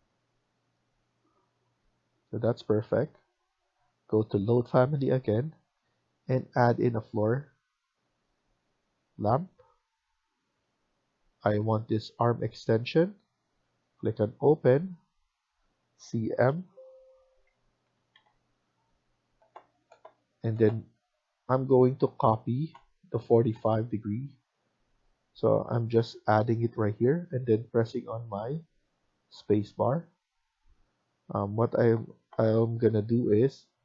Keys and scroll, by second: 2.0 Escape, 2.4 Escape, 18.0 typing.